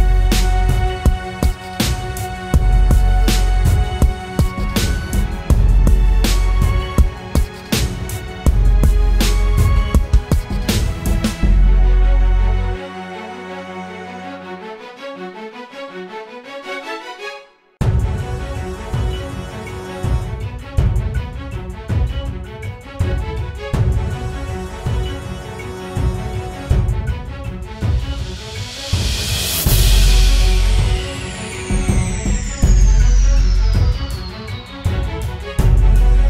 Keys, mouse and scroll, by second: 0.6 ctrl+z, 0.9 ctrl+z, 1.4 ctrl+z, 1.6 ctrl+z, 5.1 double click, 10.5 alt+click, 17.3 double click, 23.9-24.3 typing, 26.5 double click, 27.3 right click, 28.5 typing, 29.0 double click, 33.3 typing, 33.7 double click.